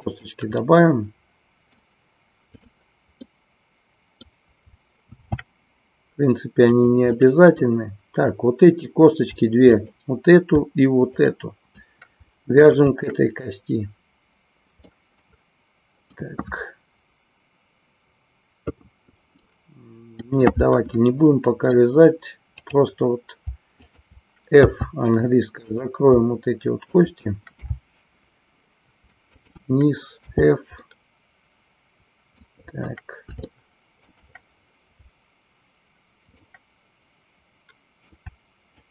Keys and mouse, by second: 0.1 click, 0.6-1.8 middle drag, 2.6 click, 3.3-4.3 middle drag, 5.1 shift+d, 6.8 click, 7.1-8.3 middle drag, 9.7 click, 11.1 shift+click, 12.6 shift+click, 14.9-16.2 middle drag, 19.4 middle click, 20.8 middle click, 23.8 shift+click, 25.6 click, 26.8 shift+click, 29.2 shift+click, 30.8-32.6 middle drag, 33.6 shift+middle click, 36.4-38.2 middle drag, 38.7 shift+click.